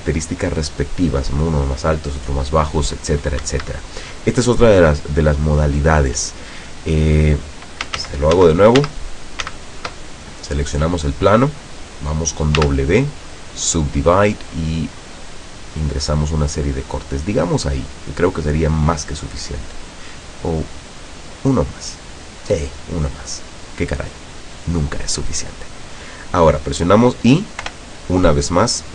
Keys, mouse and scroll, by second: 3.5 Escape, 8.1 ctrl+z, 9.6 ctrl+z, 12.7 w, 13.8 click, 15.0 click, 15.4 click, 20.8 click, 27.7 i.